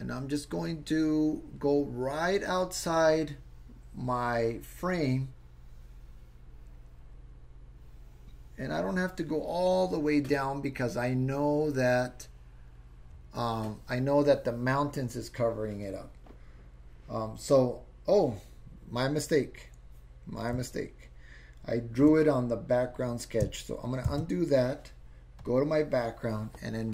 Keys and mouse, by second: 24.2 super+z, 25.4 click.